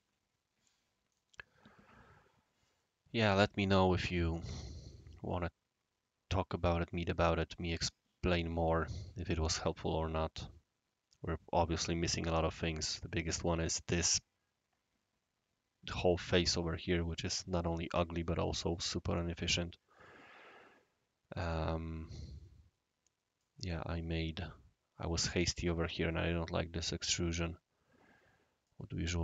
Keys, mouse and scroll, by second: 1.1 click, 1.8 scroll down 1, 1.9 scroll up 1, 2.2 scroll down 1, 2.8-3.4 right drag, 4.3-8.3 right drag, 9.8-12.4 right drag, 13.0 right click, 17.2-18.1 right drag, 19.5-23.4 right drag, 26.8-28.7 right drag.